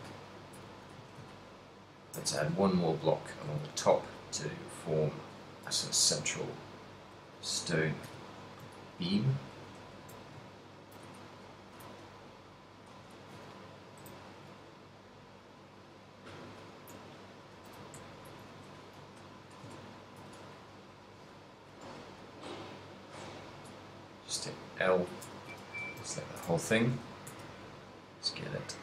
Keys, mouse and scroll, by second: 0.0 z, 0.2 ctrl+click, 0.8 a, 1.4 ctrl+click, 2.5 shift+s, 3.8 shift+a, 6.5 g, 7.3 click, 8.1 KP_3, 9.0 ctrl+middle click, 10.6 shift+middle click, 11.2 a, 11.4 right click, 11.7 g, 13.0 click, 13.2 right click, 13.2 a, 13.7 shift+middle click, 14.0 g, 16.5 click, 17.5 right click, 18.1 g, 18.6 shift+click, 18.8 KP_1, 20.0 ctrl+middle click, 20.4 z, 21.2 l, 21.6 s, 23.5 right click, 24.0 middle click, 24.7 l, 25.6 KP_1, 26.2 ctrl+middle click, 26.9 z, 27.1 s.